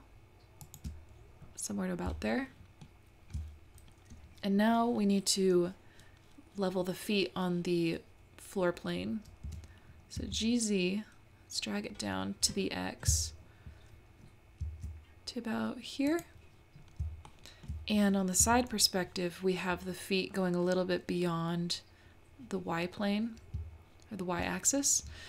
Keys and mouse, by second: 2.4 shift+middle click, 9.5 g, 17.3 shift+middle click.